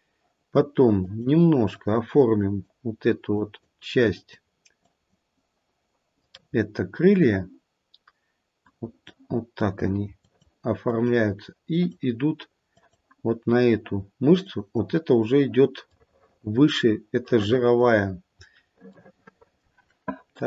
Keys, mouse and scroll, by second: 1.0 click, 1.7 click, 2.4 click, 3.3 click, 4.1 click, 4.9 click, 6.2 middle click, 8.6 click, 9.5 click, 10.2 click, 10.9 click, 11.7 click, 12.8 click, 14.4 click, 15.9 middle click, 16.5 middle click.